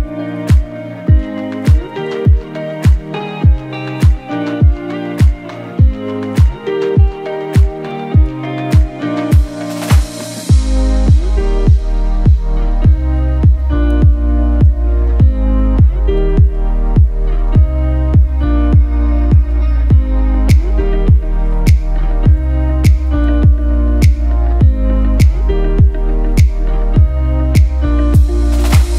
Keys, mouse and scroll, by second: 4.1-9.3 shift+drag, 9.3-9.8 typing, 9.5 click, 10.6 click, 12.2-13.8 typing, 12.6 click, 13.1 click, 13.6 click, 13.9 click, 16.8 Left, 18.8-22.3 alt+drag, 23.2 ctrl+g, 25.0 shift+click.